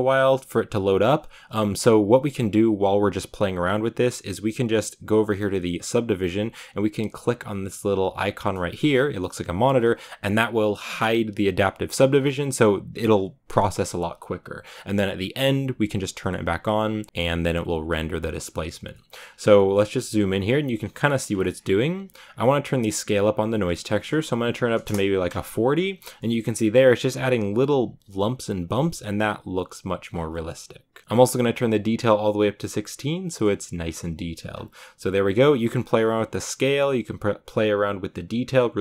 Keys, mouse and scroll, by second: 8.4 click, 12.1-12.9 scroll down 6, 12.9-14.1 scroll up 2, 14.1-14.5 scroll up 2, 14.5 click, 18.8 shift+middle drag, 19.1 scroll up 4, 19.4 shift+middle click, 19.8-20.5 scroll up 3, 20.5-21.0 scroll down 1, 21.1-22.0 scroll down 1, 22.0-24.7 scroll down 1, 24.7-26.0 drag, 26.0 shift+middle click, 26.3-27.1 shift+scroll up 1, 31.6-33.7 drag, 33.7-34.3 scroll down 6, 34.4-35.5 scroll up 4, 37.0 click, 38.4 click.